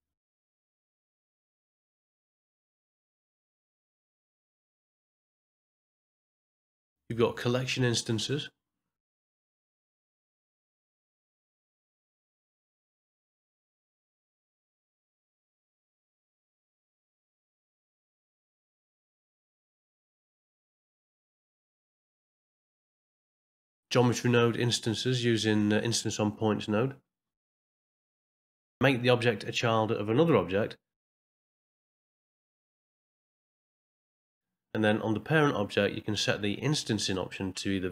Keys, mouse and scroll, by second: 0.5 click, 1.0 middle click, 1.4 click, 1.7 middle click, 2.3 click, 3.2 middle click, 3.5 click, 5.3 click, 5.6 middle click, 8.0 click, 10.4 BackSpace, 14.9 click, 16.2 shift+a, 20.1 alt+d, 21.3-21.9 shift+r, 22.0 middle click, 24.6 middle click, 27.7 middle click, 31.1 shift+click, 31.7 ctrl+p, 33.4 click, 33.8 click, 35.1 click, 36.3 click, 37.6 ctrl+middle click.